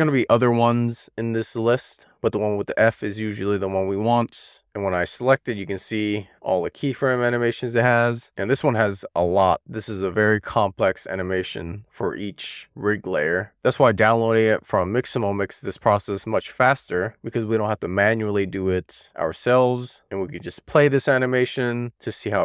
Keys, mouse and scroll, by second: 8.0-10.4 drag, 13.3-14.9 drag, 15.7-16.3 scroll up 2, 16.3-17.0 scroll down 1, 17.0-18.3 middle drag, 18.6-19.2 shift+middle drag, 19.7-20.1 scroll down 1, 20.1 shift+middle click, 20.7 middle click.